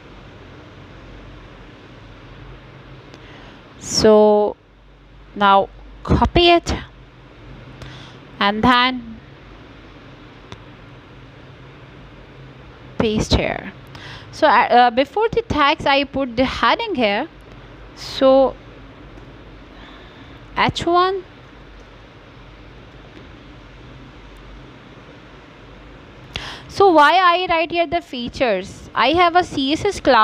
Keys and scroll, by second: 2.6 ctrl+v, 8.9 Return, 9.9 shift+,, 10.3 h, 11.4 shift+., 12.5 BackSpace.